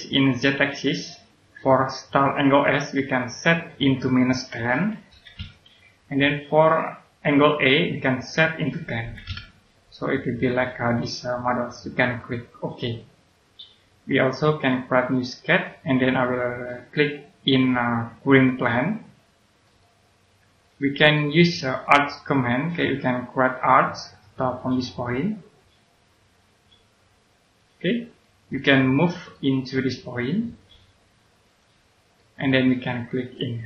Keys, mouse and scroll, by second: 0.9 click, 4.7 KP_Subtract, 5.0 KP_1, 5.3 KP_0, 7.2 click, 9.0 KP_1, 9.2 KP_0, 10.4 click, 15.4 click, 18.4 click, 19.6 middle click, 21.4-22.5 scroll up 1, 22.5 click, 23.3-26.0 scroll up 1, 27.4 click, 27.9 scroll down 1, 28.1 middle click, 31.4 click, 31.8 scroll down 1, 32.1 middle click.